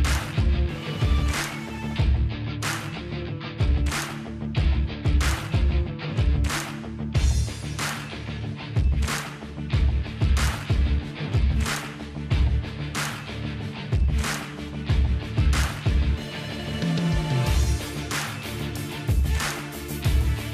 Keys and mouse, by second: 0.0 Delete, 0.0-1.5 drag, 0.0 middle click, 0.0-1.5 right drag, 0.7-1.7 middle drag, 1.7 KP_0, 3.8-5.6 middle drag, 5.6 click, 5.9-6.9 middle drag, 6.9-9.0 drag, 9.0 ctrl+z, 9.5-12.0 middle drag, 9.9 click, 10.0 Tab, 13.1-16.6 drag, 15.2 Tab, 16.2 KP_0, 16.8 z, 17.4-19.1 middle drag.